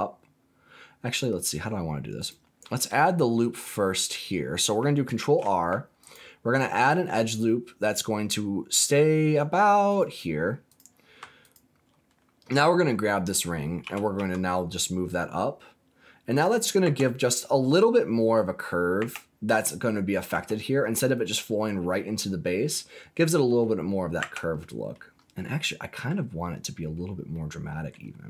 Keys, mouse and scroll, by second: 1.0 right click, 2.1 click, 5.1 ctrl+r, 9.8 click, 10.6 click, 11.4 alt+click, 13.8 g, 14.1 z, 16.3 click, 16.7 scroll down 1, 16.8 Tab, 18.9 Tab, 20.3 Tab, 21.7-22.4 scroll down 2, 22.4-22.7 scroll down 1, 22.7 middle click, 23.7 scroll up 2, 24.1 Tab, 24.5 middle click, 25.1 scroll up 2, 25.4 middle click, 27.3 middle click.